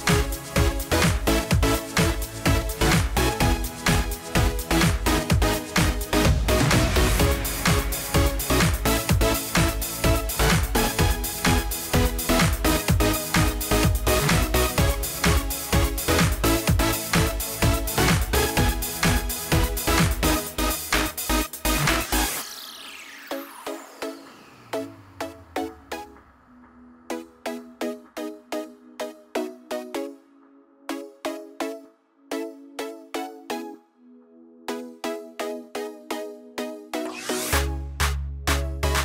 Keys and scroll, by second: 7.6 ctrl+a.